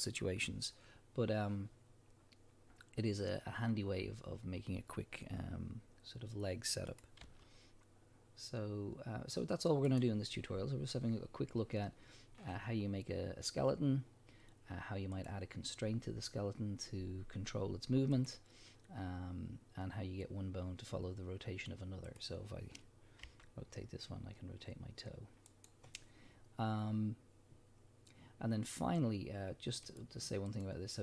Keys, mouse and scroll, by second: 6.9 click, 7.2 g, 10.0 right click, 15.1 click, 18.1 click, 22.1 click, 23.2 r, 25.7 right click, 29.8 click, 30.5 click.